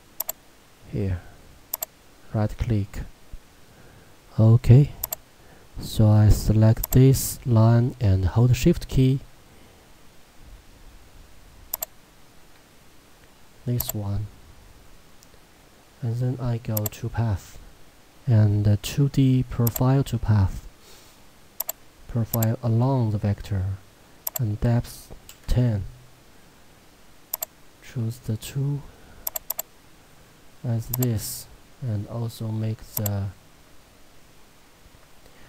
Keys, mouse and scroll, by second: 1.1 click, 1.8 right click, 5.1 click, 11.8 shift+click, 13.9 click, 19.7 click, 27.4 click, 28.3-28.9 scroll down 1, 29.3 click, 32.0-33.1 scroll down 1, 33.1 click.